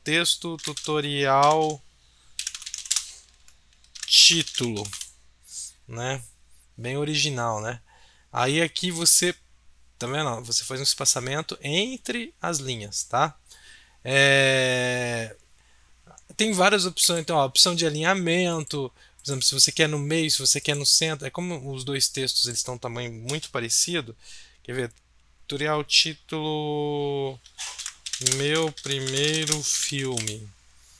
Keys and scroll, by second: 0.3-5.4 typing, 27.5-30.7 typing.